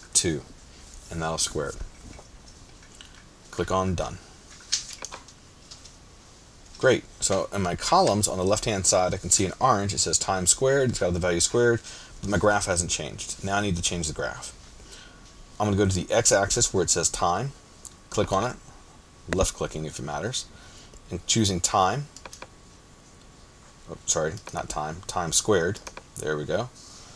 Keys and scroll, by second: 0.7 shift+2.